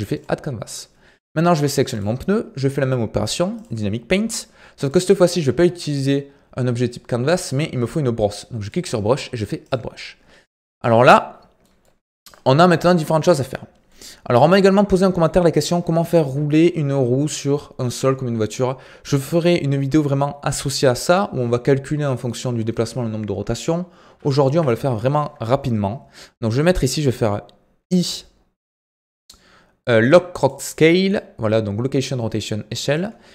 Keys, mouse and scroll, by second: 11.0-12.7 middle drag, 12.7 KP_1, 13.2 KP_3, 13.8-24.0 middle drag, 24.0 KP_1, 24.5 KP_3, 32.9-33.3 drag.